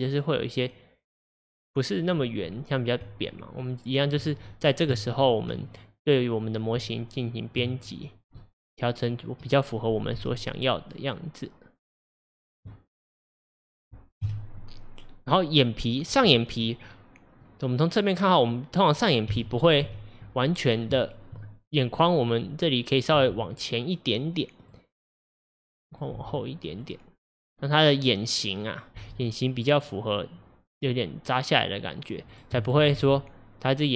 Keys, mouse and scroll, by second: 3.1 Tab, 5.0 Tab, 5.7 click, 6.9 Tab, 8.1 click, 8.5-10.2 middle drag, 10.2 g, 12.7 middle click, 13.6 click, 14.3 KP_7, 16.8-17.5 scroll down 2, 17.5-19.3 middle drag, 19.3 KP_1, 19.9 KP_3, 20.7-21.1 scroll up 2, 21.1-23.2 shift+middle drag, 23.2 g, 25.7 click, 26.2 g, 27.5 click, 29.0 g, 32.3 click, 32.6 shift+click, 33.0 g.